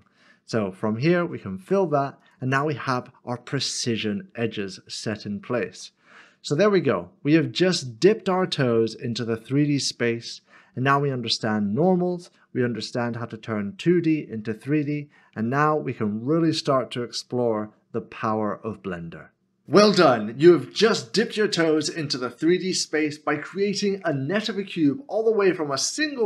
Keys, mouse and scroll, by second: 5.9 middle click, 8.0 scroll down 1, 8.7 middle click, 12.7-13.2 scroll up 1, 13.2 middle click.